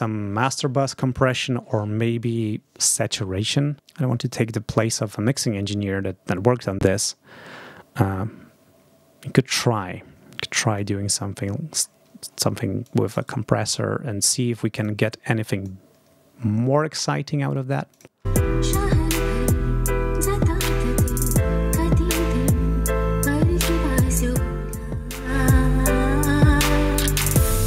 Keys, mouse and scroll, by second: 4.1 scroll up 2, 9.3 click, 10.6-11.8 drag, 12.7 click, 13.1 right click, 14.6 click, 15.3 click, 17.8 click, 18.1 space, 21.5 click, 24.0-27.6 drag.